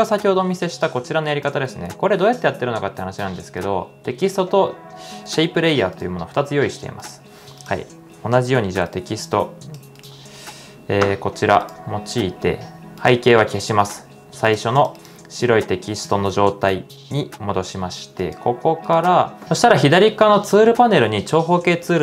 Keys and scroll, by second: 0.0-2.8 typing, 19.4 shift+super+z.